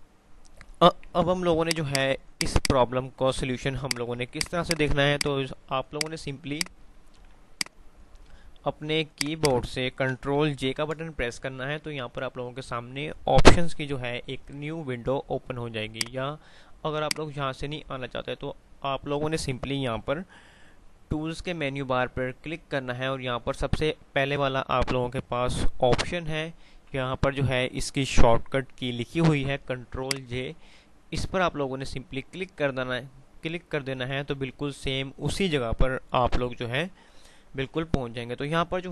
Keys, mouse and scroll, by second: 1.1 ctrl+z, 1.7 click, 3.4 ctrl+z, 6.7 F3, 7.4 F2, 7.6 click, 7.9 F2, 9.2 click, 10.9 ctrl+j.